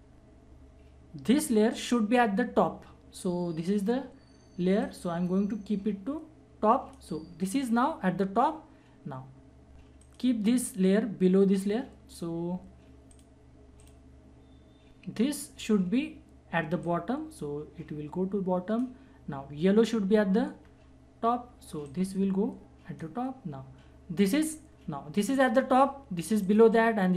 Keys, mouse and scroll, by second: 1.7 click, 4.8-9.4 drag, 10.0 click, 13.1 click, 16.8-21.9 drag, 21.9-25.2 drag.